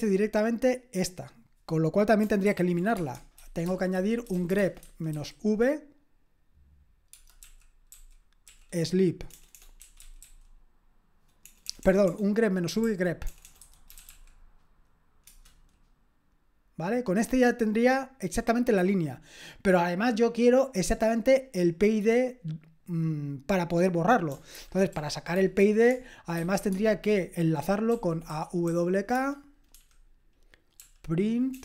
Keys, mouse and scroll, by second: 2.5 ctrl+p, 3.0-5.6 typing, 7.6-14.5 typing, 15.2 Return, 24.5 ctrl+p, 25.3-29.7 typing, 30.7-31.6 typing.